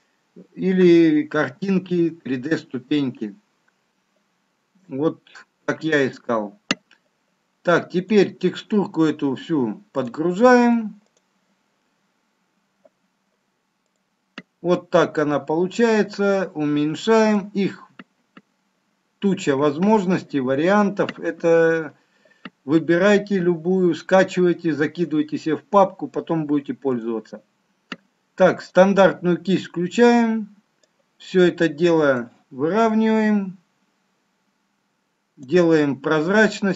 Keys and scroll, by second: 1.5 x.